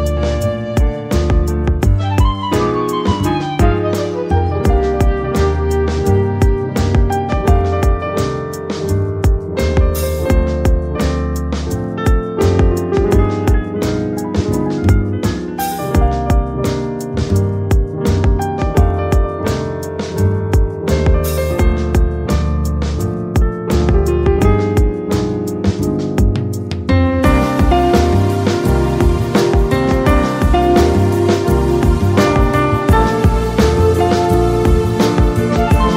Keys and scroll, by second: 11.7 space, 24.7 ctrl+z, 27.7 ctrl+j.